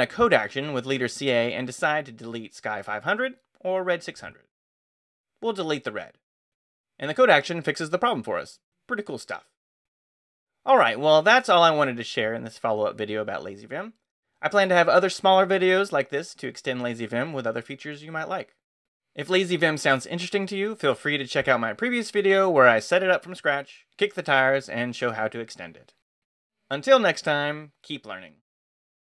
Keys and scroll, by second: 0.9 space, 1.5 c, 1.9 a, 6.4 Down, 7.1 Return, 9.1 Escape, 9.3-11.2 typing, 11.5 Return.